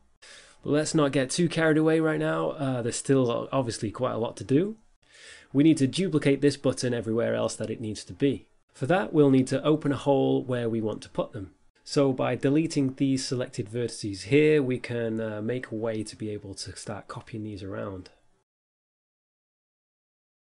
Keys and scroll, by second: 19.2 x.